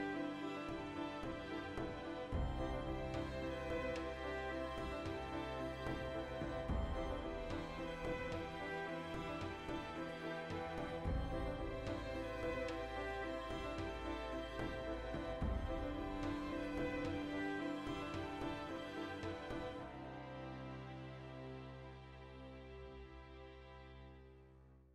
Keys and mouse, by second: 0.0-0.9 typing, 0.1 click, 0.5 click, 1.1 click, 1.2-2.8 middle drag, 2.6 g, 2.8 click, 2.9 middle click, 3.2 r, 3.5 click, 3.6 g, 3.9 click, 4.0 middle click, 4.3 shift+right click, 4.7 g, 5.2 click, 5.4 shift+right click, 5.7 g, 6.2 click, 6.4-7.5 middle drag, 7.5 right click, 7.7 middle click, 8.3 right click, 8.4 middle click, 8.6 shift+right click, 8.7 middle click, 8.9 g, 9.7 shift+click, 10.0 middle click, 10.4 right click, 11.1 g, 11.6 shift+click, 11.7 shift+right click, 12.0 g, 12.5 shift+click, 12.6-13.9 middle drag, 13.9 alt+right click, 14.2 2, 14.6 alt+right click, 14.7-18.8 ctrl+middle drag, 16.1 ctrl+x, 17.7 \, 18.4 Tab, 18.8 click, 19.0-21.2 middle drag, 19.2 Tab, 21.2 right click, 21.5 shift+right click, 21.9 f, 22.3 right click, 22.5-24.9 middle drag, 22.8 f, 24.8 f.